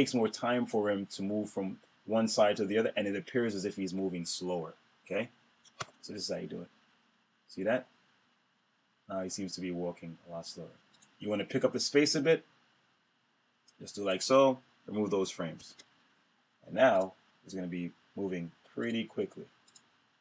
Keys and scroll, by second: 5.6 super+Return, 15.4 shift+F5.